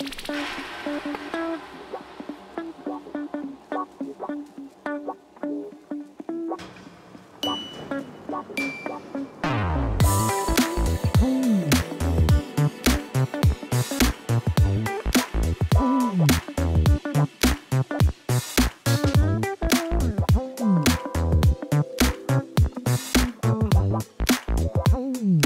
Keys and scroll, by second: 0.0 Return, 1.1-1.8 typing, 2.0 Return, 2.9 1, 3.1 Return, 3.9 ., 4.0 2, 4.2 Return, 5.9 Tab, 6.6 Tab, 15.5 i, 22.1 g, 22.7 Return, 23.6-24.3 typing, 24.6 Return.